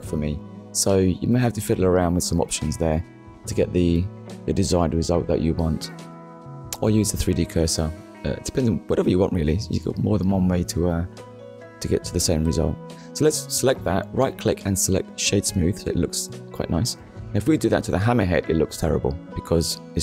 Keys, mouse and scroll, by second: 0.2 click, 1.4 click, 2.3 click, 2.7 scroll down 1, 3.2 shift+middle click, 3.9 middle click, 5.3 KP_1, 6.2 shift+middle click, 7.0 click, 8.6 shift+middle click, 9.9 scroll up 1, 11.9 right click, 13.1 click, 13.9 click, 14.4 shift+middle click, 15.7 click, 17.3 right click, 18.0 click, 19.1 click, 19.4 middle click.